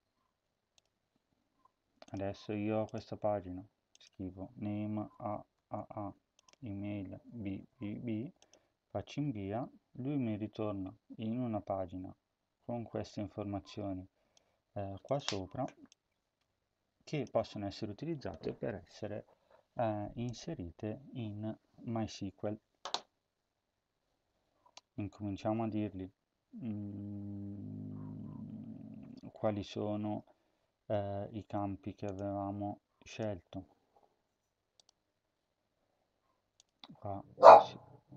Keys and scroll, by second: 4.9-5.6 typing, 7.1-7.7 typing.